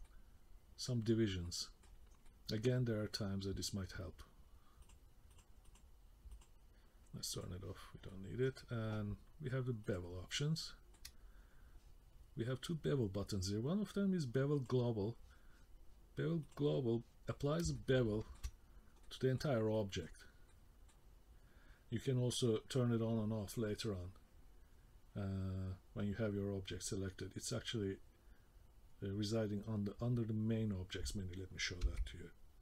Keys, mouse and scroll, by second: 0.0 middle click, 1.1 scroll up 1, 1.4 middle click, 2.2 middle click, 3.3-3.7 scroll down 1, 4.8 click, 5.3 click, 5.6 click, 6.3 click, 7.4 click, 8.1 middle click, 9.9 click, 10.6 middle click, 11.1-11.5 scroll up 2, 11.5-12.4 scroll down 2, 14.8 click, 16.6 click, 17.7 shift+middle click, 19.0 middle click, 19.7 middle click, 20.2 scroll down 2, 20.5 middle click, 21.1-22.3 scroll up 1, 31.8 v.